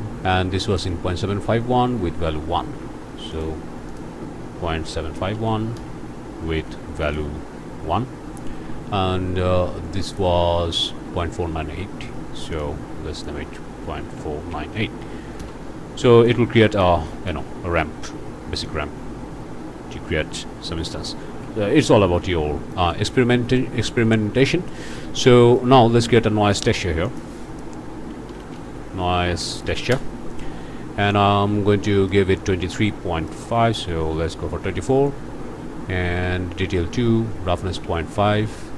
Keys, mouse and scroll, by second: 0.6 click, 3.3 click, 3.9 click, 4.6 ., 4.9 7, 5.1 5, 5.3 1, 5.7 Return, 7.0 click, 10.1 click, 12.6 click, 13.2 click, 13.8 KP_Decimal, 14.2 KP_4, 14.5 KP_9, 14.8 KP_8, 15.4 KP_Enter, 16.3 click, 17.1 shift+click, 18.6-21.0 drag, 21.2 ctrl+z, 22.3 click, 22.7 click, 24.7 click, 26.5 shift+click, 26.8 shift+a, 27.1 shift+click, 28.0-28.6 typing, 29.6 Down, 29.9 Return, 31.0 click, 31.4 scroll up 1, 31.9 click, 33.2 click, 34.1 KP_2, 34.4 KP_4, 36.4 Tab, 36.9 2, 37.5 Tab, 37.8 ., 38.1 5.